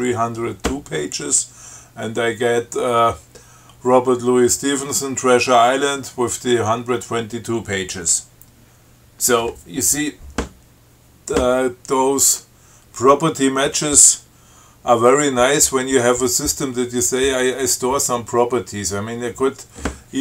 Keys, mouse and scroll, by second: 5.9-6.3 scroll up 2.